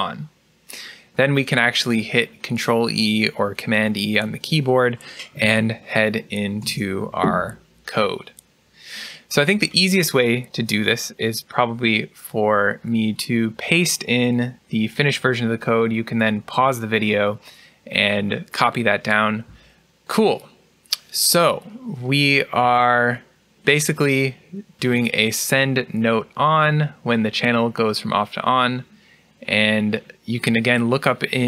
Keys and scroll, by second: 6.5 ctrl+e.